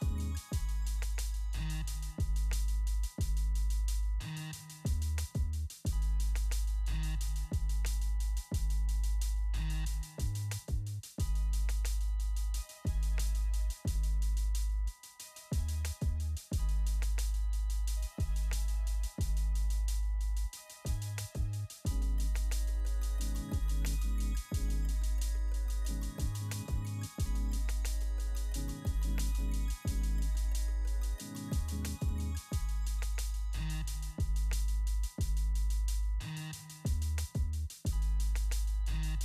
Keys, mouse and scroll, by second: 3.1-3.8 typing, 5.6 click, 9.2 right click, 11.3 click, 13.2 right click, 14.1 click, 15.7 ctrl+a, 17.9 click, 18.7 ctrl+a, 19.2 ctrl+v, 19.7 click, 20.2 ctrl+a, 20.8 ctrl+v, 21.1 ctrl+click, 21.9 ctrl+a, 22.2 ctrl+v, 22.8 click, 23.1 ctrl+a, 23.5 ctrl+v, 24.3 click, 24.8 ctrl+a, 25.1 ctrl+v, 25.7 click, 26.1 ctrl+a, 26.4 ctrl+v, 26.9 click, 27.3 ctrl+a, 27.5 ctrl+v, 28.2 click, 28.5 ctrl+a, 28.9 ctrl+v, 29.6 click, 29.9 ctrl+a, 30.2 ctrl+v, 30.7 click, 31.1 ctrl+a, 31.5 ctrl+v, 32.1 click, 32.5 ctrl+a, 32.8 ctrl+v, 33.9 click, 35.5 ctrl+a, 35.8 ctrl+v, 36.1 click, 36.7 ctrl+a, 37.1 ctrl+v, 38.1 click, 38.5 ctrl+a, 38.8 ctrl+v.